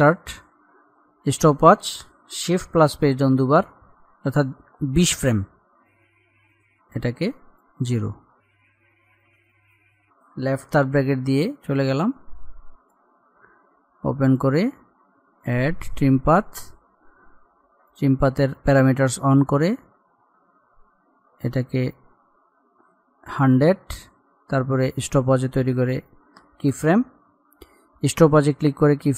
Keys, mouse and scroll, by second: 3.0 Page_Down, 5.3-6.2 scroll up 1, 8.2-8.8 scroll up 1, 10.9 [, 12.0-18.4 drag, 18.4-19.0 scroll down 1, 21.8-27.2 drag.